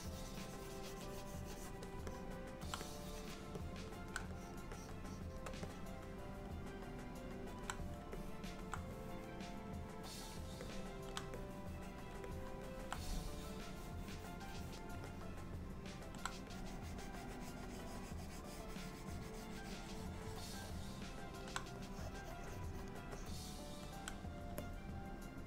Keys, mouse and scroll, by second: 2.1 middle click, 2.9 click, 3.6 middle click, 4.4 shift+click, 4.8 click, 5.5 click, 5.7 middle click, 8.2 middle click, 9.0 click, 10.7 alt+middle click, 11.0 alt+middle click, 11.5 click, 12.3 middle click, 13.0 click, 13.8 click, 14.5 click, 15.1 alt+middle click, 16.6 click, 20.7 middle click, 21.9 click, 22.5 click, 22.8 click, 23.2 alt+middle click, 24.7 middle click.